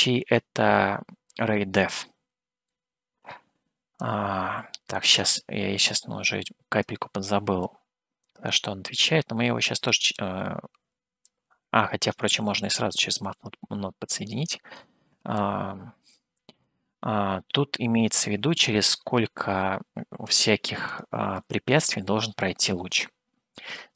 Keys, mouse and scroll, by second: 4.3 click, 6.1-7.2 drag, 7.8-8.9 drag, 10.3 click, 10.6 click, 11.5 click, 13.5-14.8 drag, 15.6-17.0 drag, 21.0-22.5 drag.